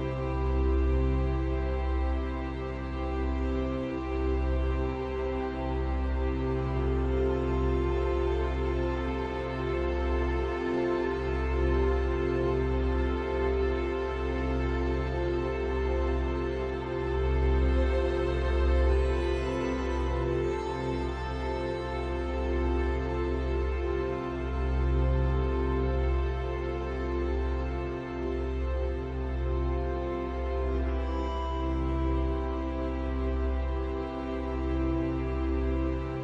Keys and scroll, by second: 14.5 ctrl+t, 26.6 ctrl+u.